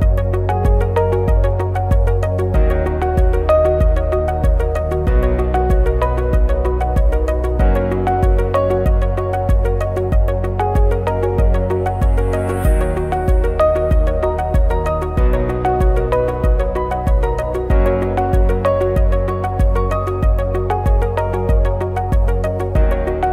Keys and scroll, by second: 1.5 ctrl+c, 1.6 ctrl+f, 3.9 ctrl+shift+a, 5.2 ctrl+shift+a, 6.8 ctrl+shift+a, 8.6 ctrl+shift+a, 9.4 ctrl+f, 10.7 ctrl+c, 10.8 ctrl+f, 12.2 ctrl+c, 12.4 ctrl+f, 13.5 ctrl+shift+a, 18.0 ctrl+shift+a, 19.2 ctrl+c, 19.3 ctrl+f, 21.7 ctrl+=.